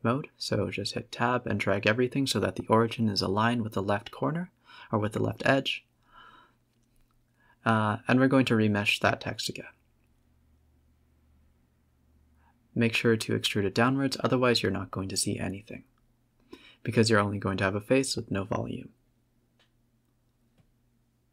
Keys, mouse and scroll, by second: 0.3 click, 0.5-0.9 scroll up 6, 0.9-2.8 middle drag, 2.8-5.0 drag, 5.5 click, 6.0-7.3 drag, 7.3 scroll down 3, 8.5 click, 9.0 click, 9.2 click, 10.8 middle click, 11.0 Tab, 11.4 a, 11.7 e, 12.6 Tab, 12.9 z, 13.3-14.4 middle drag, 14.4 click, 15.8 click, 16.3 z, 16.9-17.4 middle drag, 17.4 scroll up 3, 19.4 click, 20.2 middle drag, 20.5 middle drag, 21.0 middle click, 21.1 middle click.